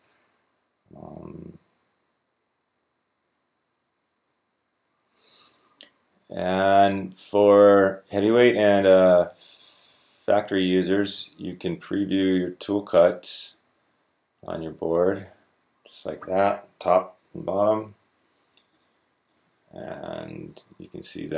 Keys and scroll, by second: 17.3 f.